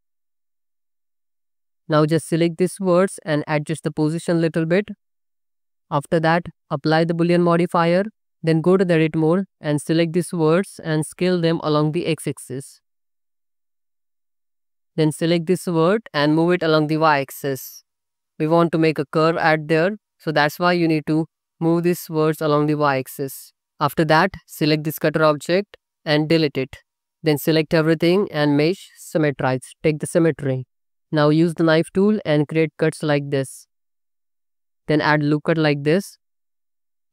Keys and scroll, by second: 0.6 Tab, 1.2 alt+z, 2.2 alt+z, 2.7 z, 5.5 Tab, 8.4 Tab, 9.3 alt+z, 10.7 s, 11.2 x, 14.4 1, 14.6 alt+z, 15.5 z, 23.6 Tab, 26.2 x, 27.4 Tab, 27.7 a, 31.0 1, 32.1 c, 32.5 space, 33.2 Escape, 33.7 space, 34.7 ctrl+r, 35.9 ctrl+r, 36.8 alt+z.